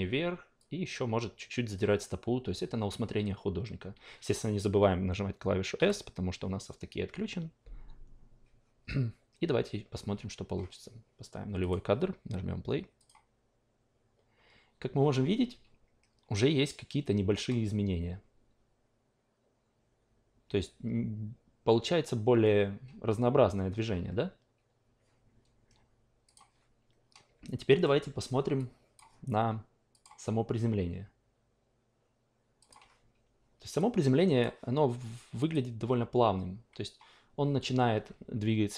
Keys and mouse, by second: 5.7 s, 11.7 click, 13.0 click, 26.3 click, 27.8 alt+middle click, 28.6 click, 30.0 click, 32.6 click, 33.8 click, 35.4 click.